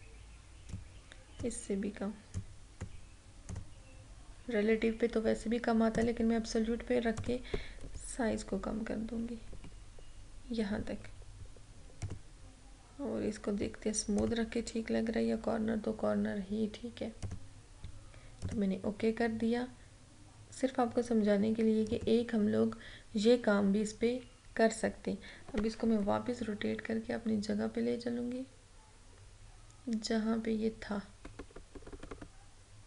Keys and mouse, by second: 6.0 click, 7.8 Down, 12.0 click, 17.2 click, 21.9 click, 26.2 Right.